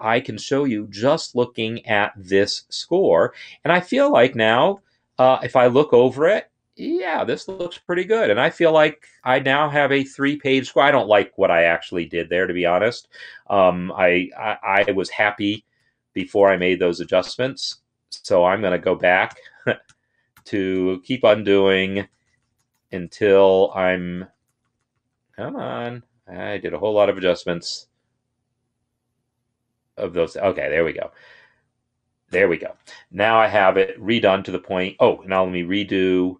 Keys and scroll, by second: 14.9 ctrl+z, 15.4 ctrl+z, 15.6 ctrl+z, 16.0 ctrl+z, 16.8 ctrl+z, 17.4 ctrl+z, 18.9 ctrl+z, 19.6 ctrl+z, 20.0 ctrl+z, 20.5 ctrl+z, 21.0 ctrl+z, 21.4 ctrl+z, 21.5 ctrl+z, 21.9 ctrl+z, 22.1 ctrl+z, 22.2 ctrl+z, 22.5 ctrl+z, 22.7 ctrl+z, 23.0 ctrl+z, 23.2 ctrl+z, 23.6 ctrl+z, 23.8 ctrl+z, 24.1 ctrl+z, 24.3 ctrl+z, 24.6 ctrl+z, 24.7 ctrl+z, 25.2 ctrl+z, 25.4 ctrl+z, 25.6 ctrl+z, 25.7-30.0 ctrl+z, 30.7 ctrl+shift+z, 36.0 ctrl+shift+z.